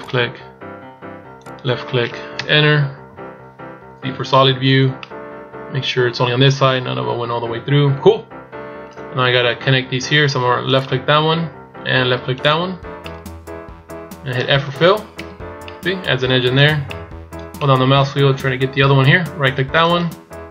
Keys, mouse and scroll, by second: 4.8 middle click, 10.4 right click, 12.2 shift+right click, 12.8 middle click, 15.0 f, 15.3 middle click, 16.6 middle click, 17.4 middle click, 19.6 right click.